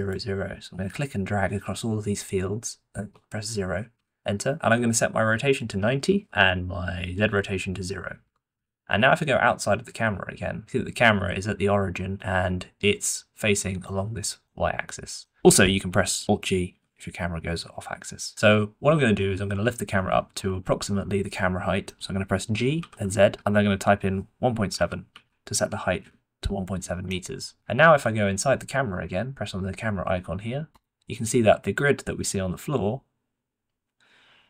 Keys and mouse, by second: 5.5 click, 7.3-8.5 drag, 11.3-13.8 middle drag, 14.1-15.3 middle drag, 15.8 g, 16.6 alt+g, 18.3-19.1 middle drag, 19.9 shift+middle drag, 21.0-22.0 middle drag, 22.7-27.0 middle drag, 22.7 g, 27.5 middle click, 30.7-32.0 middle drag, 32.7-34.4 middle drag.